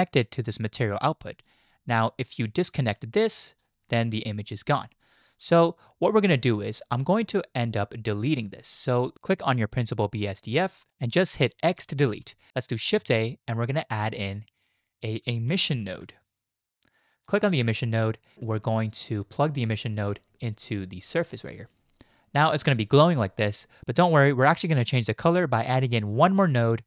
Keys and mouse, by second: 0.4-1.5 drag, 2.9 click, 3.3 click, 7.4-9.1 drag, 9.4-10.9 drag, 10.9 click, 12.1 x, 13.1 shift+a, 19.0 click, 19.9 click, 20.2-21.5 drag.